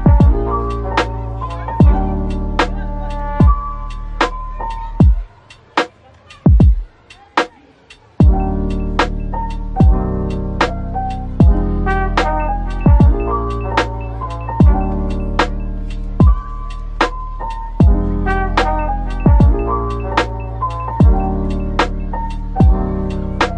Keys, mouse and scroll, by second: 2.6 scroll up 1, 3.5 typing, 4.4-5.2 scroll up 1, 5.0-5.8 typing, 6.2 scroll, 6.3-7.1 scroll down 1, 7.1 typing, 11.4 double click, 12.6-14.0 typing, 14.8 double click, 19.7 double click, 20.5 Tab.